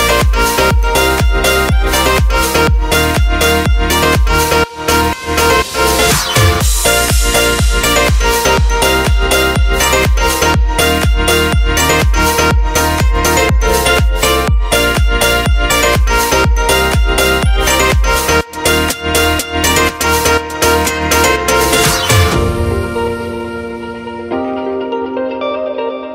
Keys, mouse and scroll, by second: 1.7 Tab, 2.5 alt+a, 2.7 middle click, 8.3 click, 17.1 click.